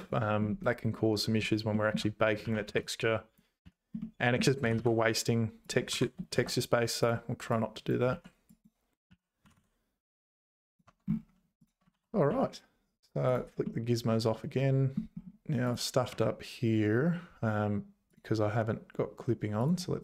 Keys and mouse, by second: 1.7 shift+click, 2.4 z, 2.7 1, 2.9 click, 3.6 z, 4.6 g, 5.9 g, 7.6 click, 8.1 z, 9.1 z, 9.4 g, 10.8 Tab, 11.9 ctrl+s, 12.3 z, 13.3 click, 13.7-15.3 middle drag, 15.6 click, 16.1 Tab, 18.1 click, 19.6 click.